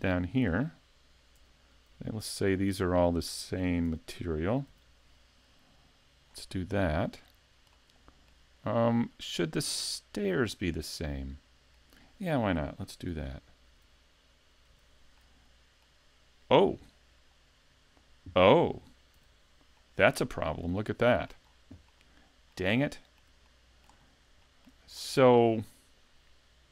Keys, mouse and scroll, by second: 0.1 shift+middle click, 1.4 l, 1.9 l, 2.6 l, 3.9 ;, 4.7 l, 6.3 scroll down 4, 6.9 shift+middle click, 7.4 scroll down 1, 7.7 shift+middle click, 8.7 middle click, 10.6 middle click, 13.1 l, 13.7 l, 14.7 l, 15.2 middle click, 19.2 l, 19.8 middle click, 20.9 shift+middle click, 21.5 scroll up 2, 21.9 shift+middle click, 22.8 middle click, 23.5 shift+middle click, 24.0 scroll up 2, 24.5 shift+middle click, 25.0 middle click.